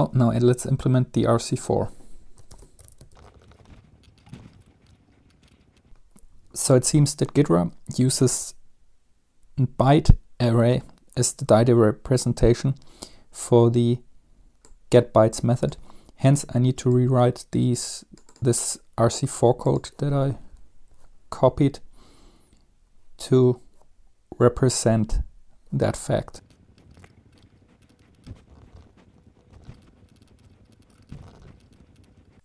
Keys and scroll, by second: 2.4-4.9 typing, 20.9 Tab, 25.8 shift+Tab, 26.0 Left, 26.2 Left, 26.3 typing, 28.3-30.0 typing, 31.2 Return, 31.4 typing, 31.4 Return, 31.4 ctrl+s.